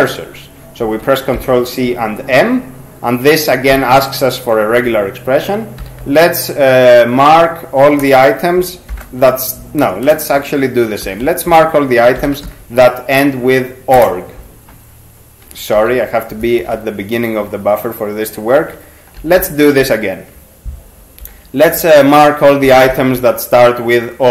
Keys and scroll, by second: 0.8 ctrl+c, 1.4 m, 5.8 \, 8.0 BackSpace, 8.9 ^, 10.1-13.0 typing, 14.0 Return, 15.8 ctrl+g, 16.6 alt+shift+<, 19.2 ctrl+c, 19.4 m, 21.2-23.4 typing.